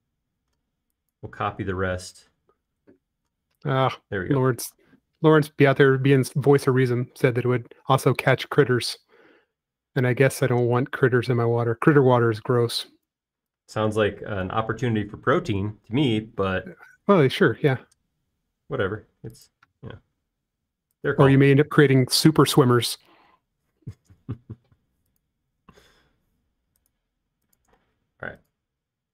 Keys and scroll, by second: 10.4 l, 13.1 typing, 14.2 typing, 17.6 typing, 20.4 typing, 22.5 e, 24.3 typing, 26.6 Up, 28.7 typing.